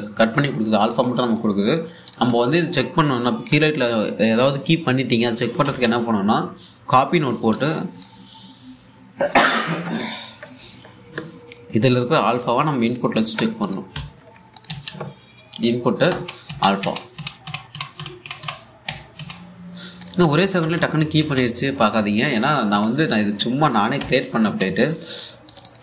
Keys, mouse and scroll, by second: 1.5 click, 2.7 click, 6.3 k, 8.2-9.7 drag, 13.1 click, 14.6 1, 15.2 click, 15.3 a, 16.7 a, 18.9-19.8 typing, 20.7 click, 21.2 typing, 22.6 typing, 24.0 click, 24.6-25.1 typing.